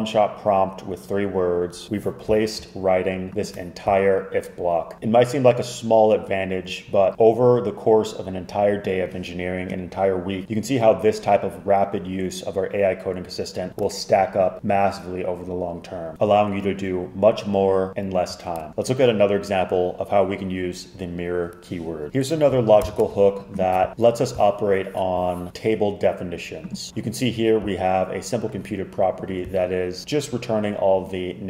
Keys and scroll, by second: 22.9 shift+super+].